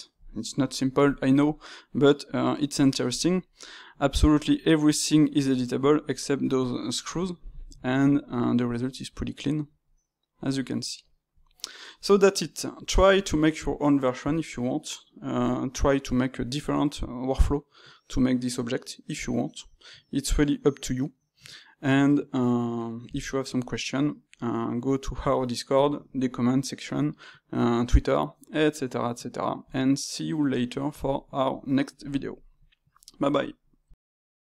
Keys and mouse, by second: 0.3-5.3 shift+middle drag, 9.1-16.2 middle drag, 23.9 middle click, 28.8-34.5 middle drag.